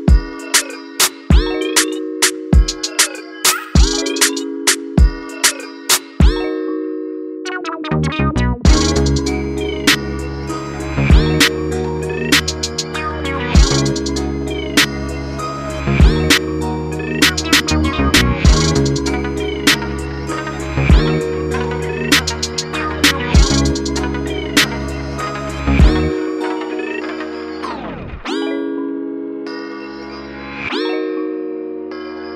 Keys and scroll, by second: 9.3 ctrl+z, 15.0 ctrl+z.